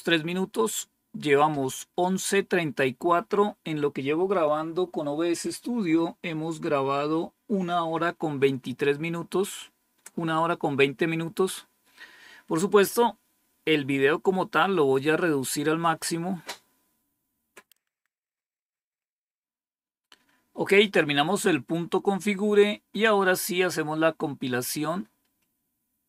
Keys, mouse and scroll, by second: 24.6-26.0 drag.